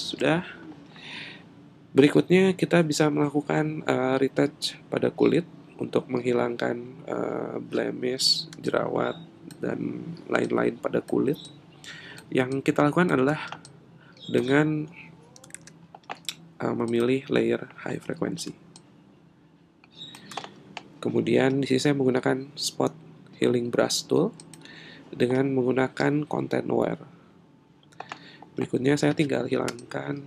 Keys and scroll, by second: 15.5 super+z.